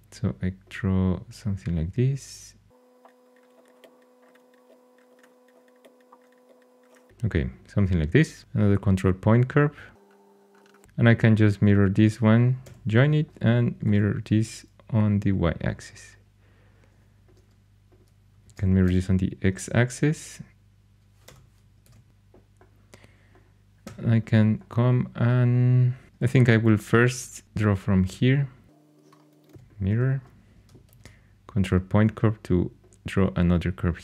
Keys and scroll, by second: 3.3-6.9 typing, 8.4 ctrl+super+c, 12.6 j, 13.8 alt+x, 18.4 alt+x, 18.8 y, 21.2 ⟲, 21.8 alt+x, 23.8 3, 26.1 shift+a, 29.4 alt+x, 29.5 alt+x, 30.8 ctrl+super+c.